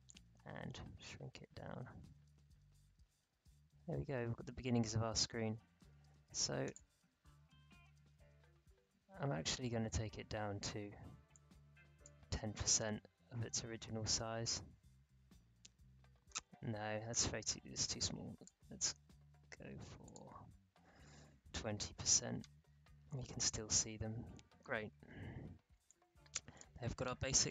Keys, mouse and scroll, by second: 7.9 alt+scroll up 1, 11.3-12.8 drag, 12.8-13.4 alt+scroll up 1, 13.5 alt+scroll down 1, 14.5-14.9 alt+scroll up 1, 17.2-20.0 drag, 21.1-22.0 typing, 22.9-23.9 alt+scroll down 2, 23.9-25.1 scroll down 1, 25.8-27.5 drag.